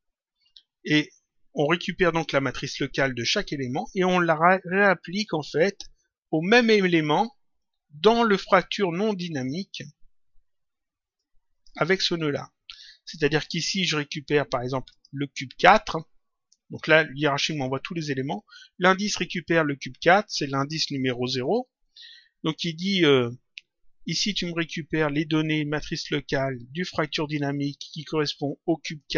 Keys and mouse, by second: 11.1 click, 14.9 click.